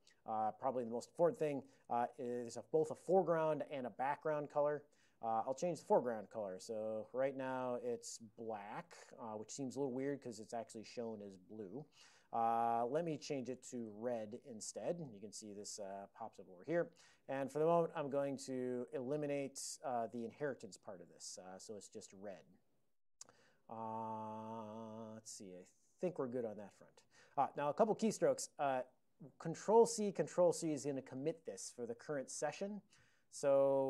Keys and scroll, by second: 1.2 ctrl+p, 1.6 ctrl+p, 1.8 Tab, 6.4 ctrl+n, 8.8 Tab, 13.5 alt+d, 13.6-14.7 typing, 15.2 ctrl+e, 16.1 ctrl+a, 17.2 ctrl+n, 17.4 ctrl+n, 17.6 ctrl+n, 17.7 ctrl+n, 18.4 ctrl+a, 18.6 ctrl+l, 19.7 ctrl+f, 19.9 ctrl+f, 20.0 ctrl+f, 20.5 Return, 21.5 ctrl+p, 21.7 ctrl+p, 23.4-23.9 ctrl+p, 24.0 ctrl+n, 24.7 ctrl+n, 26.2 ctrl+n, 26.4 ctrl+n, 26.5 ctrl+n, 27.7 ctrl+p, 28.2 ctrl+p, 28.3 ctrl+p.